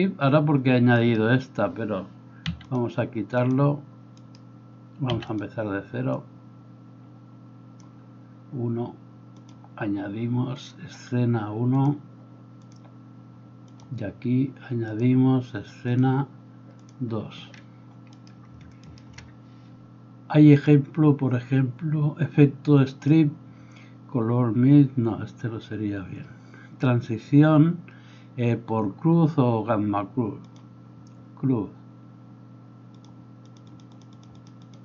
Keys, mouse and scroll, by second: 1.0 middle click, 1.0 right click, 2.5 x, 4.2 middle click, 4.2 right click, 5.1 x, 18.1 middle click, 18.1 right click, 18.8 shift+middle click, 18.8 shift+right click.